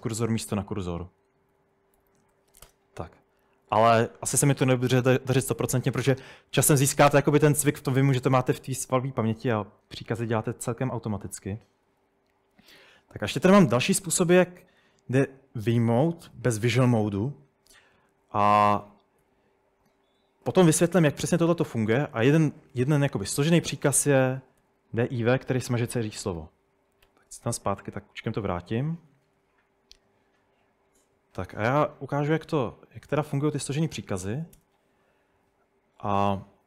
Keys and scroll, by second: 1.3-3.7 typing, 11.7-13.3 typing, 18.6-19.3 typing, 24.2-25.3 typing, 26.4 Escape, 27.1 u, 34.1-35.0 typing.